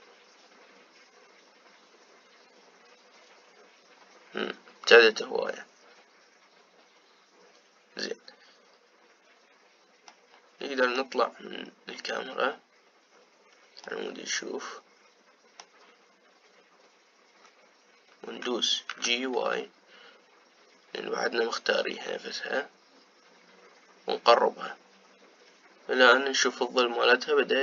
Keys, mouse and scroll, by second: 11.4-13.6 middle drag, 13.6-15.2 scroll down 3, 15.2-17.1 middle drag, 17.1 scroll down 2, 20.2 g.